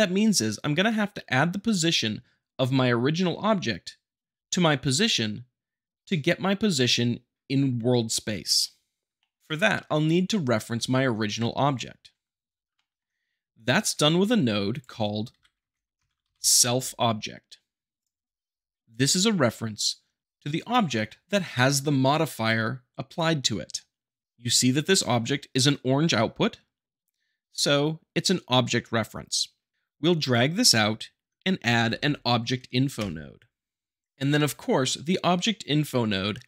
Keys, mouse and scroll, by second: 9.2 shift+middle click, 12.3-13.8 middle drag, 13.9 a, 14.7 click, 15.3 s, 15.6 l, 15.9 Return, 16.1 e, 16.3 l, 18.8 click, 29.7 click, 31.7 b, 31.9 j.